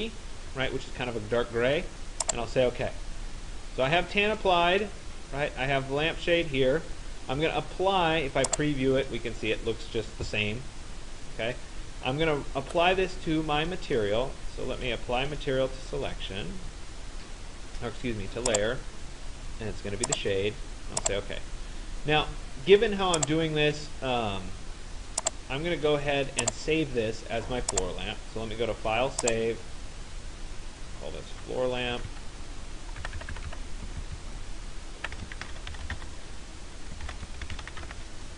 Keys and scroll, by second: 0.0-0.3 typing, 31.7 Right, 33.1 Left, 34.0 shift+Left.